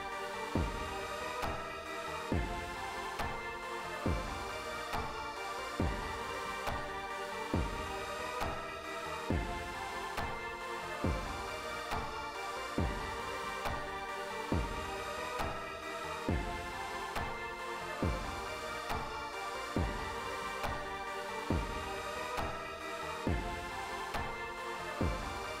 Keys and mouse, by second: 7.2 click, 8.5-9.9 drag, 14.5 click, 15.1 click, 15.7 click, 18.1 click.